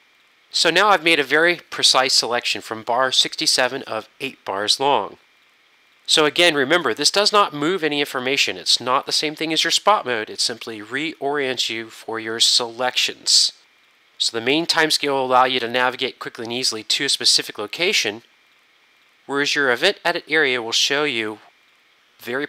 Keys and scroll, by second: 0.0 Return, 0.1 Home.